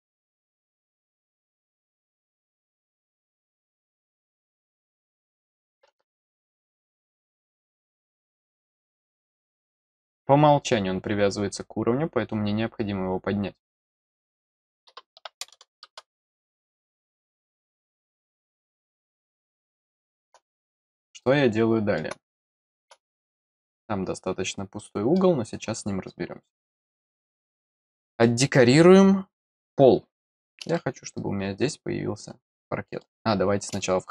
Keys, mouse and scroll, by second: 4.9 click, 6.9 click, 7.0 click, 9.6 click, 13.9 click, 18.9-20.2 middle drag, 20.5 middle click, 21.2 middle click, 22.3 middle click, 23.1 middle click, 24.7 middle click, 28.9 scroll down 1, 30.6 scroll down 1, 30.7-33.0 middle drag, 33.7 middle click.